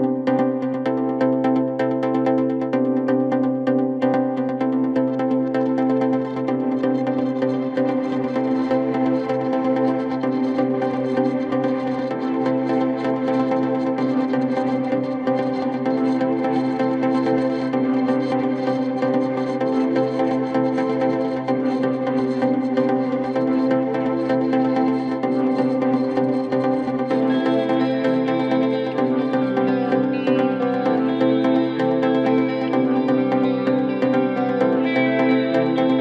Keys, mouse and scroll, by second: 0.9-1.8 scroll up 3, 1.8-6.9 drag, 6.9-7.8 scroll up 3, 7.8 Tab, 8.6 3, 9.3 KP_1, 10.0-10.6 scroll up 1, 10.6 e, 14.2 g, 15.6-17.1 middle drag, 20.7 KP_1, 21.5 e, 24.0 s, 28.4 e, 29.1 s, 31.6 e, 34.8-36.0 middle drag.